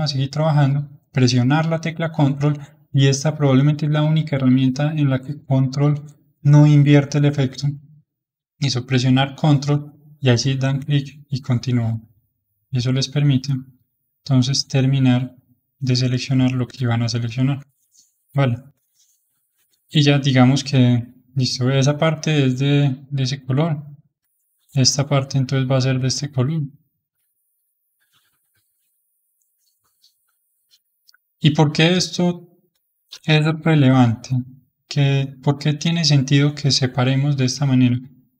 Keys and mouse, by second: 10.3-17.7 ctrl+drag, 18.0-21.2 middle drag, 21.2-23.0 shift+middle drag, 23.0-26.1 drag, 26.2-27.5 middle drag, 27.5-30.6 ctrl+drag, 30.8-33.5 middle drag, 33.5-35.7 ctrl+drag, 35.7-38.3 middle drag.